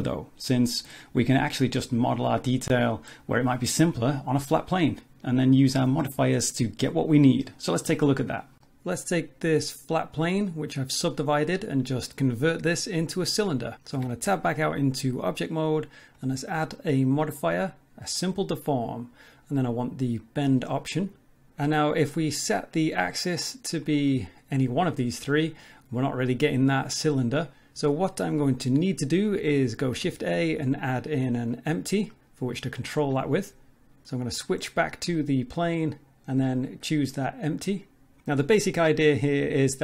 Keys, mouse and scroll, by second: 0.6 middle click, 2.3 click, 3.8 click, 4.1 scroll down 3, 4.2 middle click, 6.2 r, 7.0 click, 7.5 Tab, 7.9 middle click, 8.4 scroll up 3, 8.6 middle click, 10.5 middle click, 12.9 middle click, 13.9 Tab, 16.1 click, 20.2 click, 21.5 click, 22.6 click, 24.1 click, 25.6 middle click, 29.8 shift+a, 34.0 click, 36.6 click.